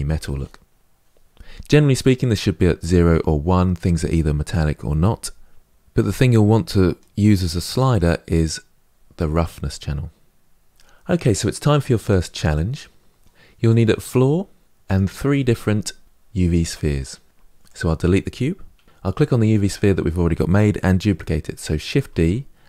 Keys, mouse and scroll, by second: 2.0-9.4 drag, 12.4-13.5 drag, 14.7 click, 17.4 click, 18.6 Delete, 18.8 click, 21.8 shift+d.